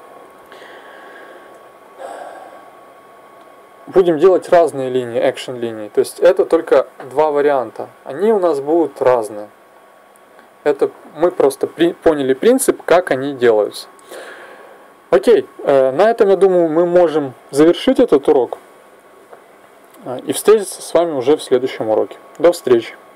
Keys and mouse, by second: 0.7-3.1 middle drag, 3.1-5.1 drag.